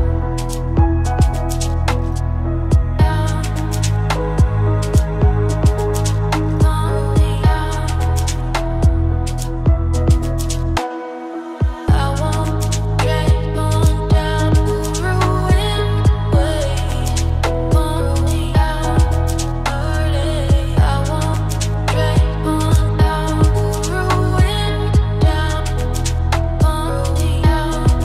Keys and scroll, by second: 20.5 ctrl+t.